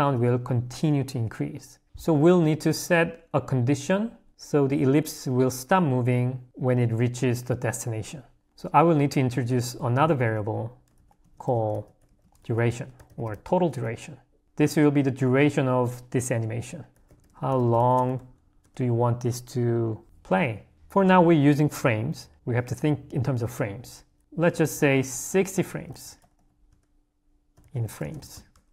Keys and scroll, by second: 0.1 h, 10.9 0.